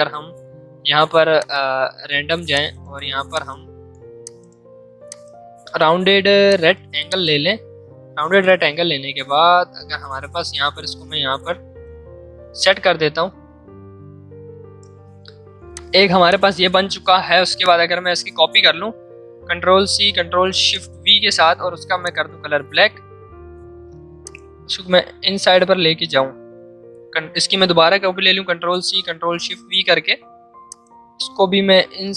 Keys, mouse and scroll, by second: 1.3-8.3 drag, 8.3 Up, 9.5 Down, 15.7 click, 19.3 click, 19.6 ctrl+c, 20.4 ctrl+shift+v, 22.0 click, 24.1-28.4 alt+shift+drag, 28.4 ctrl+c, 29.1 ctrl+shift+v, 30.7-32.1 alt+shift+drag.